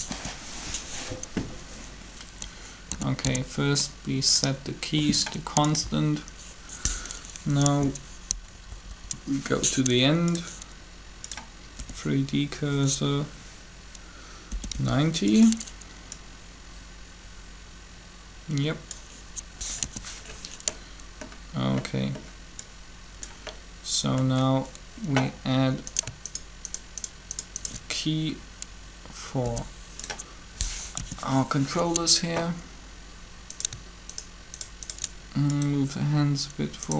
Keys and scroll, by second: 0.1 7, 2.9 typing, 8.3 Up, 8.4 Up, 8.6 Up, 11.8 r, 14.3 typing, 19.5 3, 29.4 i, 32.2 7.